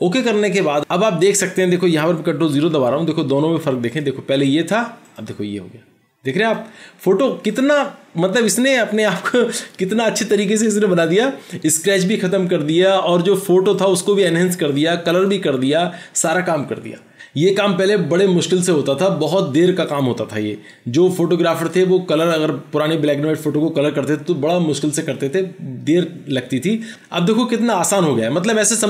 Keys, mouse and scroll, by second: 2.6 ctrl+0.